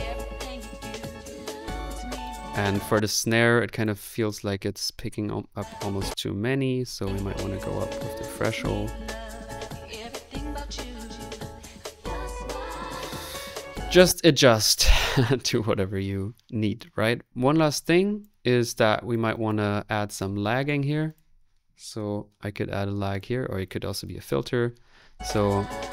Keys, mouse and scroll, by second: 2.6 click, 2.8 space, 7.0 middle click, 7.9-8.9 scroll up 1, 8.9 scroll up 1, 9.0 click, 9.3 middle click, 12.5 ctrl+z, 13.7-25.4 drag, 13.9 space, 21.7-22.6 typing, 25.6 space.